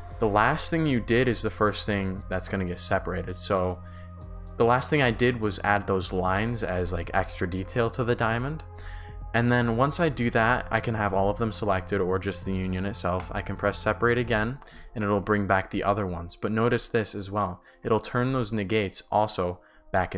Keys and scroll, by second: 14.4-16.5 typing.